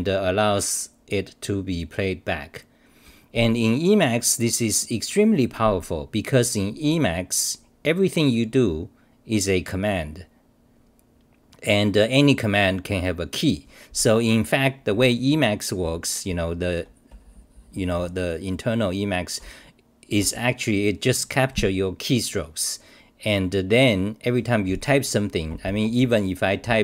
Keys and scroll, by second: 15.8 t, 16.3 s, 17.1 d, 25.5 Return, 26.0 c, 26.6 u.